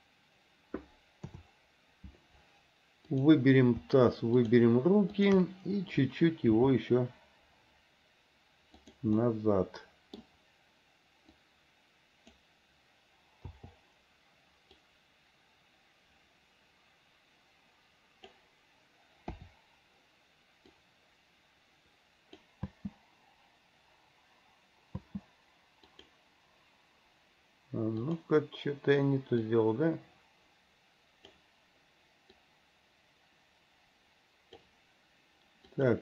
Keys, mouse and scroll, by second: 1.5 KP_7, 3.3 click, 4.5 shift+click, 5.3 shift+click, 6.7 r, 9.4-10.4 middle drag, 11.7 click, 15.0-18.6 drag, 19.5 KP_7, 21.0-22.7 drag, 22.8 space, 25.2 space, 26.1 click, 28.3 click, 29.7-31.6 drag, 32.6-34.9 drag, 35.9 click.